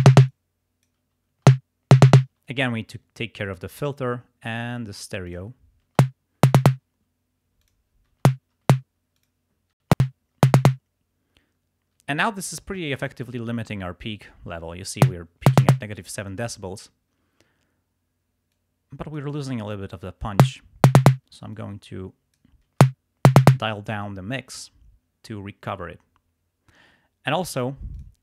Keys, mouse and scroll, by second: 0.5 click, 1.1 space, 2.3 space, 3.6 click, 4.5 click, 5.3 click, 6.0 space, 7.0 space, 7.7 click, 8.3 space, 8.5 space, 9.2 click, 9.9 space, 12.0 space, 15.0 space, 16.6 space, 18.5 click, 20.3 space, 21.3 space, 21.5-22.5 drag, 22.7 space, 23.6 space, 27.9 click.